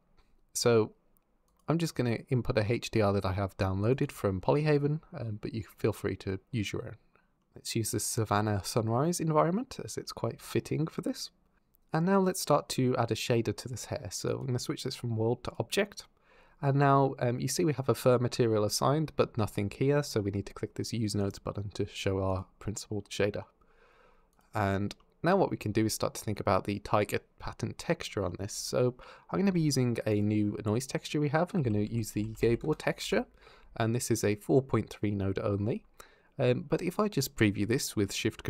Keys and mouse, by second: 10.5 middle click, 11.9 click, 14.1-15.3 drag, 21.0 click, 22.1 click, 24.8 click, 24.9 middle click, 29.3 shift+a, 34.0 click, 38.0 ctrl+shift+click.